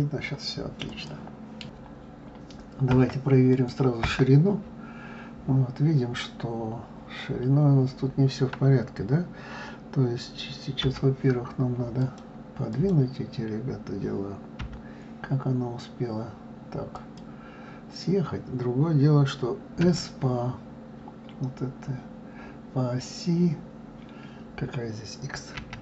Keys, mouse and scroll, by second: 1.0 click, 3.5 click, 4.0 KP_1, 10.8 g, 12.0 click, 12.1 right click, 12.7 click, 14.6 g.